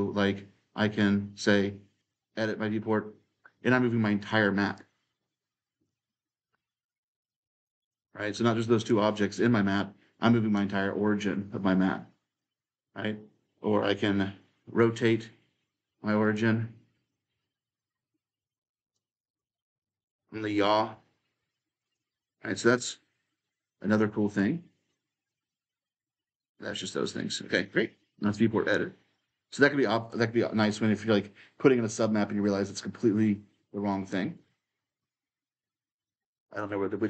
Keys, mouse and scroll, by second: 1.7-3.9 drag, 4.5-8.7 drag, 8.7-11.7 right drag, 11.7-14.1 drag, 16.0 click, 16.9-21.1 right drag, 21.6-23.7 drag, 25.1-29.9 drag, 29.9 right click, 30.0-33.3 typing, 35.5 s, 35.8 a, 36.5 w.